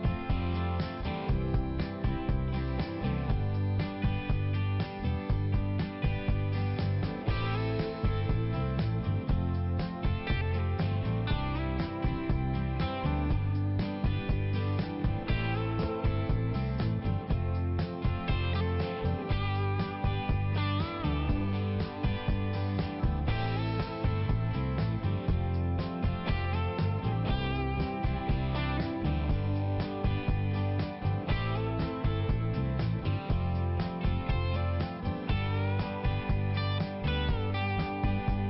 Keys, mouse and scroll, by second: 0.1 click, 0.5 click, 2.5 click, 6.5 click, 9.4 click, 9.7 click, 12.2 click, 14.5 click, 16.7 click, 18.8 click, 21.9 click, 22.0 click, 24.4 click, 24.4 click, 26.8 click, 26.9 click, 27.0 click, 27.1 double click, 30.2 click, 30.3 click, 32.5 click, 32.6 click, 32.7 click, 34.3 click, 34.5 click, 35.4 click, 35.5 click, 36.4 click, 36.5 click.